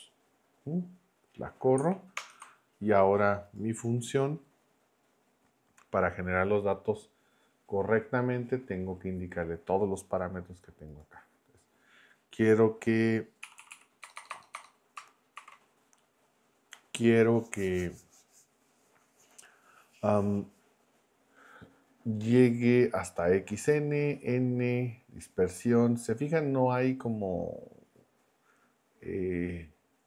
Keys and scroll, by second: 2.2 ctrl+Return, 13.4 Right, 14.0 BackSpace, 15.3 shift+9.